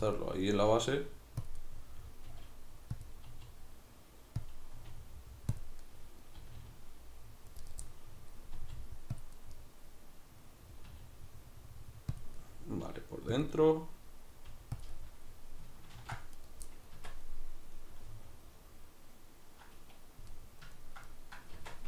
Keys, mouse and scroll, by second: 0.1 click, 0.2-1.5 middle drag, 0.7 g, 1.5 click, 1.6 middle click, 2.3 g, 3.1 click, 3.3 r, 4.5 click, 4.8 r, 5.6 click, 5.9 middle click, 6.4 r, 7.7 right click, 7.9 middle click, 8.6 r, 9.2 click, 9.4-10.9 middle drag, 10.9 r, 12.3 click, 12.4 middle click, 12.9 g, 13.5 click, 13.5-14.5 middle drag, 14.5 g, 14.9 click, 14.9-15.9 middle drag, 15.9 ctrl+r, 16.5 right click, 16.7-17.0 middle drag, 17.0 Tab, 17.3-21.6 middle drag, 21.6 Tab.